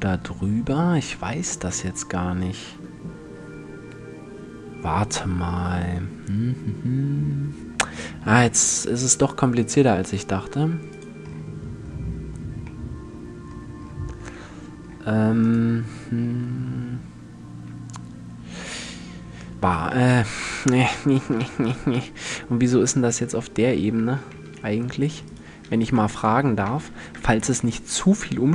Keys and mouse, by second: 9.2-11.3 drag, 13.5 click, 15.1 click, 15.3-17.0 middle drag, 19.8 Tab, 22.7 click, 24.5-24.9 middle drag, 25.4 a, 26.5 m.